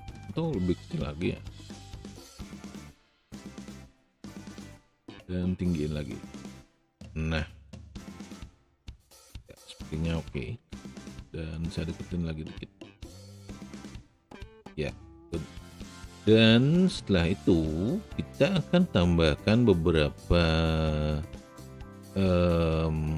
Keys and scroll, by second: 10.7 w.